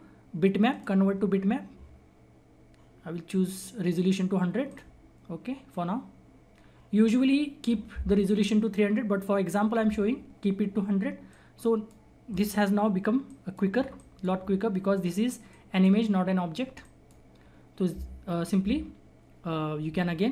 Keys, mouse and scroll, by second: 4.6 click, 10.8-11.2 scroll down 1, 11.2 click, 11.3 click, 12.3 scroll up 1, 13.2 click, 14.6-15.4 scroll down 1, 15.4 click, 16.3 scroll up 1, 16.8 click, 17.2 scroll down 1, 20.2 scroll down 1.